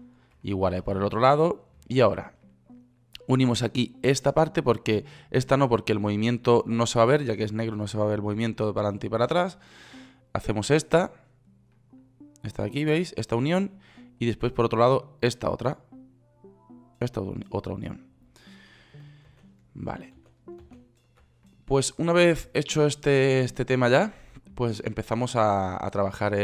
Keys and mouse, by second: 0.3 ctrl+z, 3.7-10.3 right drag, 12.9-14.6 drag, 17.2-18.4 drag, 19.7 ctrl+z, 20.6 ctrl+z, 21.1 ctrl+z.